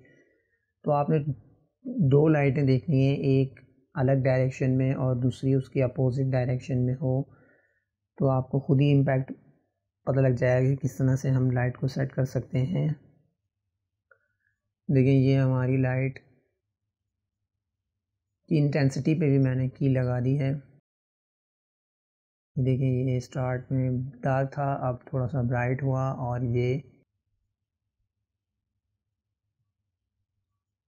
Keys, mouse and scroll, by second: 9.8-12.8 drag, 16.4 click, 20.4-22.1 drag, 26.2 click, 26.9-30.3 drag.